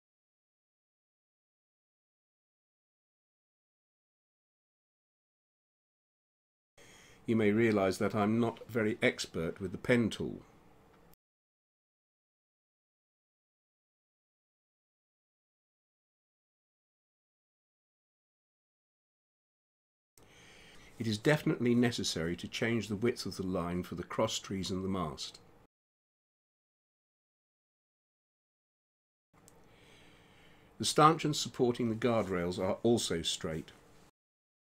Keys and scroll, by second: 2.9 space, 7.8 space, 14.3 space, 17.2 space, 18.8 space, 21.8 space, 23.3 space, 27.7 space.